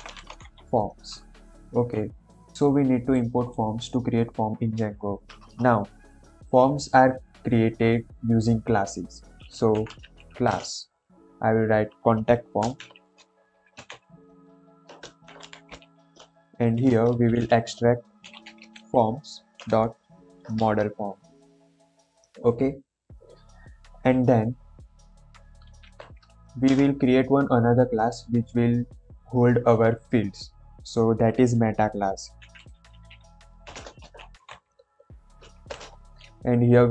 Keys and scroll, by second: 0.0-0.9 typing, 1.8 Escape, 5.4 Return, 9.6-10.8 typing, 12.5-16.5 typing, 17.3 Left, 18.0-19.5 typing, 20.5 shift+Return, 25.3 Right, 25.7 shift+;, 26.6 Return, 32.4-35.5 typing, 35.7 Return.